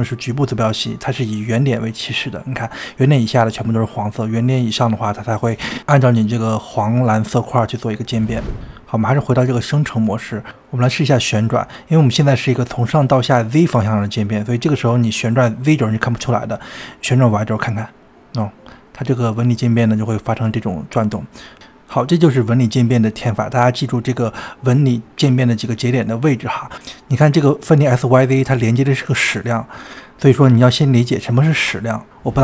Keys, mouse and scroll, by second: 4.3-7.3 middle drag, 7.9 middle click, 17.4-20.4 drag, 22.8-24.8 drag, 29.1-30.3 scroll down 2, 30.3-32.0 shift+middle drag, 32.0-32.4 scroll up 2.